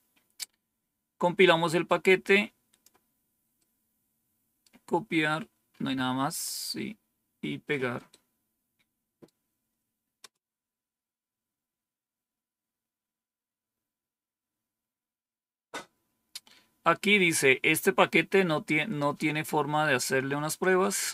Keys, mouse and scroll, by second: 1.8-2.8 drag, 3.5-4.6 right drag, 6.7-7.4 scroll down 1, 8.0-9.2 right drag, 10.1 Return, 20.5-21.1 drag.